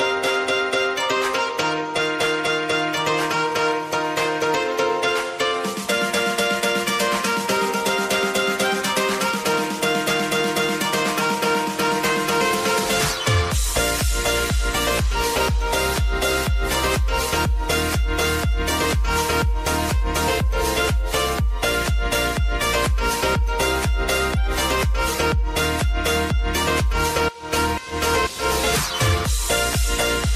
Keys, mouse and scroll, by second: 0.8 ctrl+alt+Home, 2.0 click, 3.1 ctrl+alt+Home, 5.0 s, 5.6 click, 6.9 Return, 7.8-11.8 drag, 12.5 Return, 13.6 r, 14.2-17.0 drag, 18.1 Return, 19.1 click, 21.5 Up, 24.8 click, 26.1 Return, 27.0 click, 29.9 click, 30.2 s.